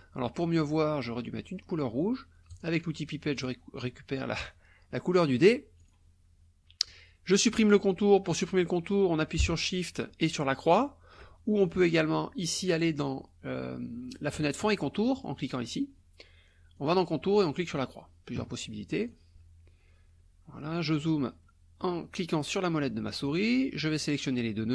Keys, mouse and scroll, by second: 2.5 click, 3.3 click, 5.8 click, 10.7 shift+click, 12.5 click, 15.5 click, 16.8 click, 17.4 click, 19.0 click, 20.6 click, 21.4 click, 22.2 click, 23.1 click.